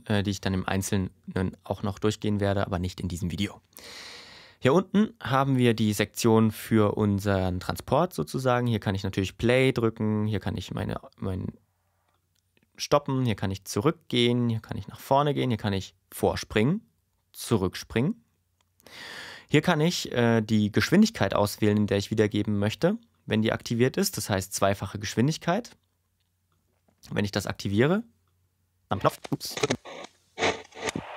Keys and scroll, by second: 28.8 space.